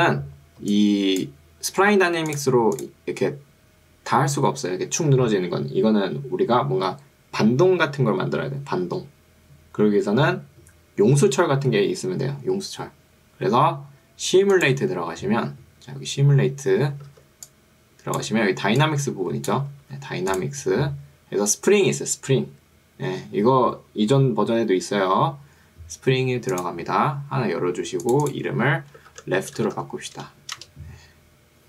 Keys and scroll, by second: 0.7 1, 17.1 ctrl+2, 19.9 Escape, 29.1 shift+l, 29.5 e, 29.7 f, 29.9 t, 30.7 Return.